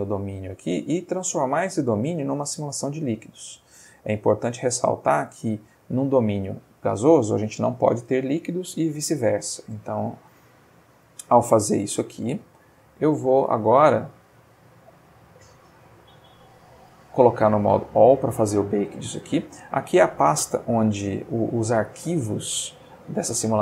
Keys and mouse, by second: 2.7 click, 3.5-10.1 drag, 11.9 middle click, 12.6 middle click, 13.1 middle click, 16.0 click, 16.9 click, 18.0 middle click.